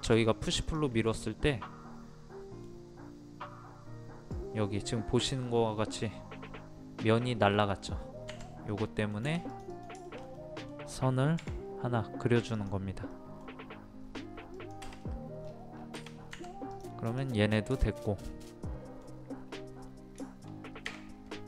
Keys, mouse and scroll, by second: 0.0 m, 0.6 click, 1.4-3.4 middle drag, 8.3 Escape, 8.7 middle click, 9.5 click, 10.0 shift+middle click, 12.5 click, 13.1 middle click, 14.5 click, 15.0 middle click, 15.4-15.7 scroll down 1, 16.3 Escape, 16.7 click, 17.8 shift+middle click, 18.2-18.6 scroll up 1, 18.6 middle click, 19.4-19.8 scroll up 1, 20.2 shift+middle click.